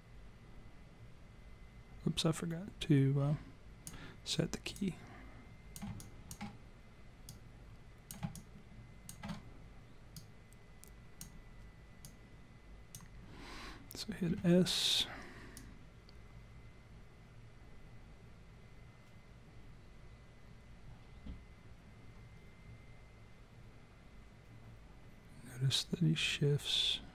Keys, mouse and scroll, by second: 4.7 click, 6.0 alt+click, 7.3 click, 8.4 alt+click, 10.2 click, 12.0 click, 14.3 s, 15.6 click.